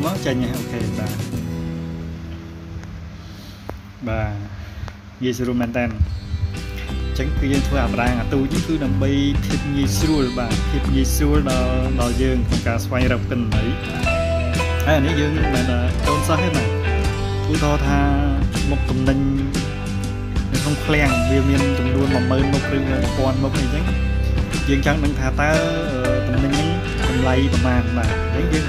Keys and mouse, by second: 1.0 click, 1.6-2.3 drag, 5.5 ctrl+click, 6.7 ctrl+click, 7.8 ctrl+click, 10.6 click, 11.2 click, 11.9 click, 12.5 click, 14.6 click, 18.2 click, 19.9 ctrl+click, 20.7 ctrl+click, 22.8 ctrl+click, 23.9 ctrl+click, 27.1 ctrl+click, 28.2 ctrl+click.